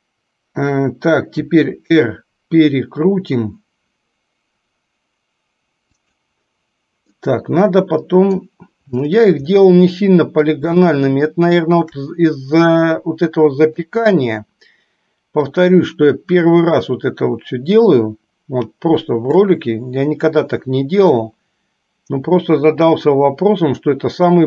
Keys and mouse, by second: 1.7 r, 7.4-8.8 middle drag, 10.1 middle click, 11.3-12.4 shift+middle drag, 13.2-14.3 middle drag, 15.8-20.0 drag, 21.7-24.4 drag.